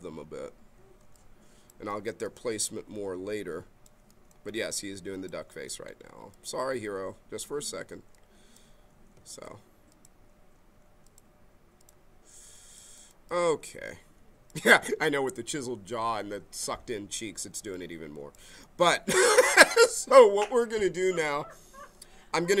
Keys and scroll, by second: 9.2 ctrl+z.